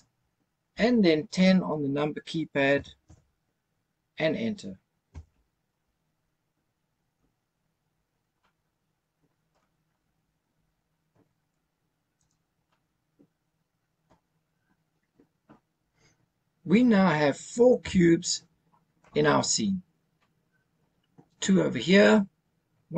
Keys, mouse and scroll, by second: 2.7 KP_1, 3.0 KP_0, 5.1 KP_Enter, 6.3-7.1 scroll down 2, 8.4-9.5 middle drag, 10.0-10.7 scroll down 2, 10.7-11.5 scroll up 2, 12.1 click, 12.6-14.1 middle drag, 14.4-15.2 scroll down 2, 15.3-15.7 scroll up 1, 17.8 KP_0.